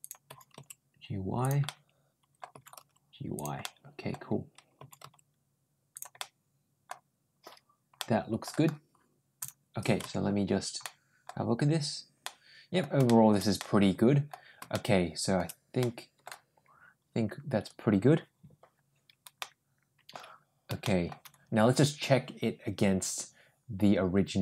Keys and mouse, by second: 0.1 g, 1.5 middle click, 2.3 g, 3.4 middle click, 4.6 g, 6.0 middle click, 7.8 middle click, 9.2 click, 9.8 Tab, 10.6-11.1 middle drag, 12.0-12.6 middle drag, 12.9 shift+middle drag, 13.4 middle click, 14.5 shift+middle click, 15.6 middle click, 19.2 middle click, 20.6 shift+middle click.